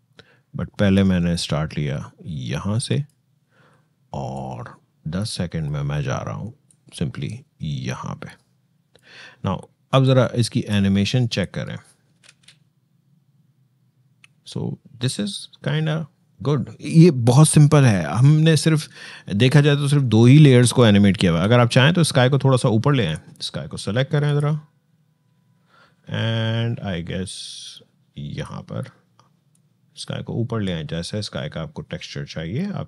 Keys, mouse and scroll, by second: 12.0 shift+space, 21.0 shift+space, 22.9 shift+click, 27.0-32.8 shift+drag.